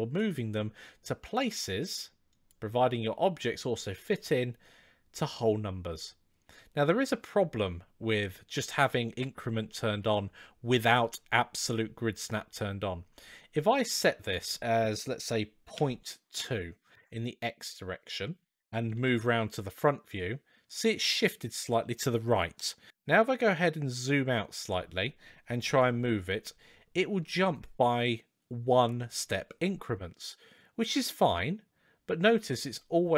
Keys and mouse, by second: 2.1 drag, 8.7-12.2 drag, 14.0-17.9 drag, 18.7 KP_1, 22.9 g, 25.5 g.